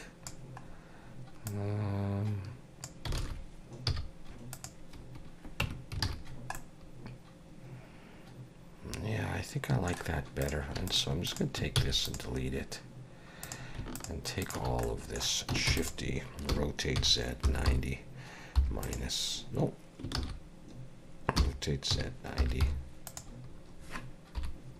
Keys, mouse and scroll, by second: 0.7 scroll up 2, 1.5 click, 3.2 alt+a, 3.9 z, 5.6 Tab, 6.0 alt+a, 6.3-6.6 scroll down 2, 6.5 middle click, 10.4 click, 10.9 shift+click, 11.3 click, 11.8 x, 12.4-12.8 scroll down 2, 13.4 click, 14.0 shift+click, 14.5 click, 14.8 middle click, 15.7 shift+d, 16.6 r, 20.2 ctrl+z, 21.4 r, 24.4 KP_7.